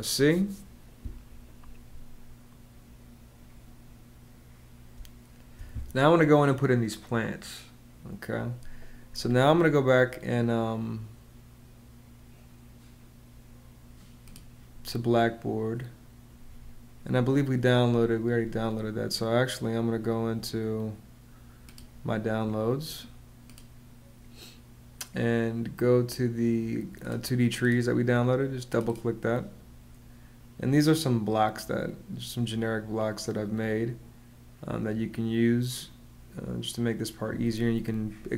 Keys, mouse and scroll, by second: 4.7 space.